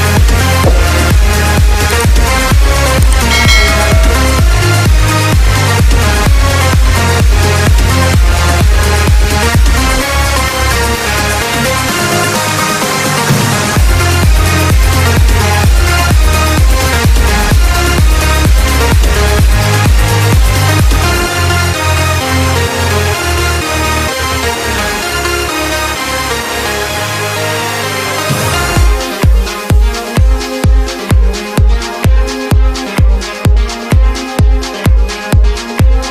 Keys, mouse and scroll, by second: 1.3 b, 5.7 b, 6.1 b, 8.9 b, 9.3 b, 10.4 b, 15.2 b, 15.5 b, 19.8 b.